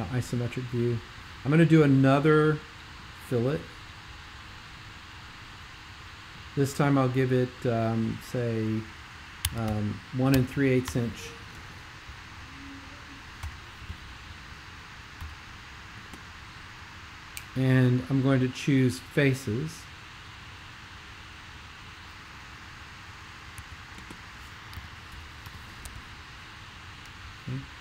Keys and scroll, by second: 9.2-11.3 typing, 13.4 BackSpace, 15.2 Left, 23.6-25.9 typing.